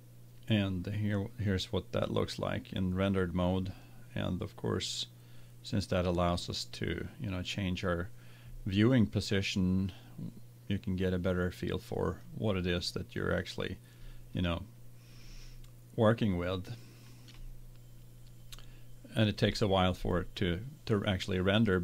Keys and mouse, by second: 3.8-5.6 middle drag, 9.4-10.9 middle drag, 11.1-12.3 middle drag, 15.5 middle click.